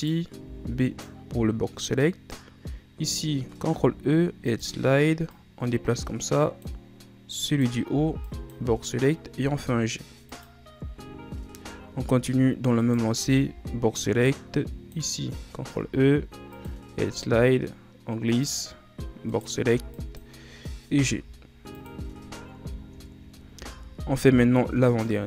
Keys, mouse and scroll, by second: 0.1 right click, 0.6 b, 3.9 ctrl+e, 7.7 right click, 8.1 b, 9.5 g, 11.1 ctrl+scroll up 7, 13.0 right click, 13.4 b, 15.9 ctrl+e, 19.5 right click, 19.8 b, 21.1 g, 22.4 ctrl+scroll up 5, 23.0-23.3 shift+scroll down 3, 23.3-23.7 ctrl+scroll up 1, 23.7 z, 24.2 z, 25.1 right click.